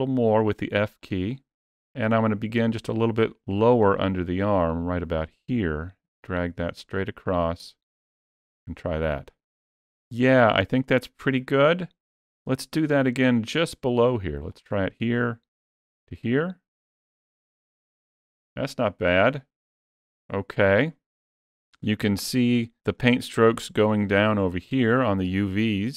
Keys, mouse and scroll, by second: 4.5 click, 14.3 click, 19.1-19.9 scroll down 1, 19.9 scroll down 3, 22.1-22.8 scroll up 4, 22.8 shift+middle click, 24.5-25.1 scroll down 3, 25.1 shift+middle click.